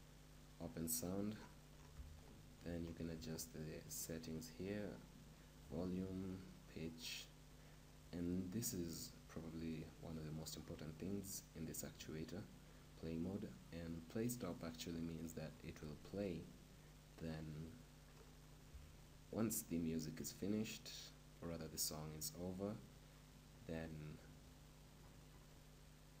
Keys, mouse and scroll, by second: 0.0-14.1 drag, 15.5-18.1 middle drag.